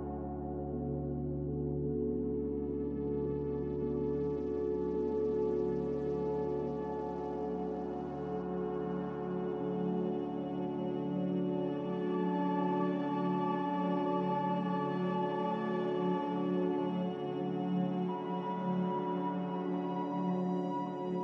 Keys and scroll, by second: 0.4-2.0 typing, 1.1 Return, 3.6-4.3 typing, 6.9-12.0 typing, 14.5 x, 17.1-18.7 typing, 20.2 z.